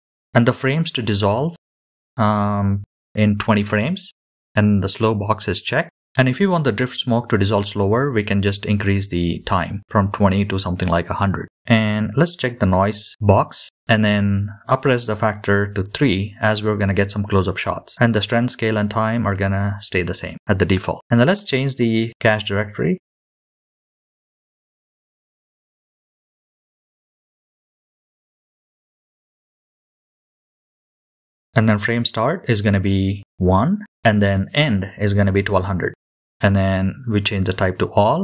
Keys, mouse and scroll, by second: 0.7-1.5 drag, 2.1-5.4 drag, 5.5-6.4 scroll down 2, 6.4-8.8 scroll down 3, 8.8-10.3 scroll down 1, 10.3-15.8 drag, 18.4-19.1 scroll down 1, 19.1-20.4 scroll down 1, 20.5-22.9 scroll down 2, 22.9-36.5 drag, 24.5 BackSpace, 24.8 BackSpace, 24.9 BackSpace, 25.1 BackSpace, 35.7 KP_0.